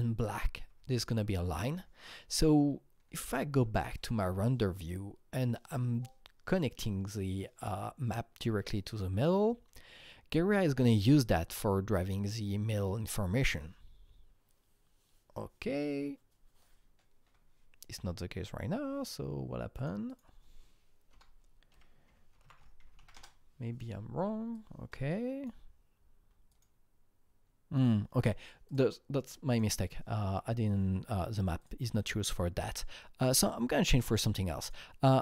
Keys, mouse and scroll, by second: 0.6-5.3 drag, 0.6 r, 3.9 r, 5.3 click, 7.1-11.9 drag, 11.9-14.6 drag, 20.0 click, 21.1-23.4 typing, 24.5-27.7 drag, 27.7 click, 28.6 click, 29.5 click, 31.6 click, 34.6 click.